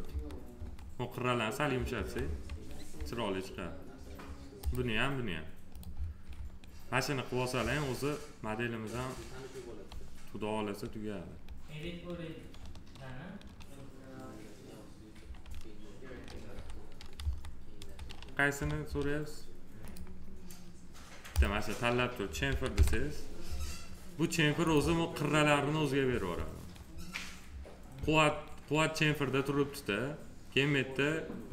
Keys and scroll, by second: 0.0 F4, 1.9 F4, 16.5 f, 22.4 c.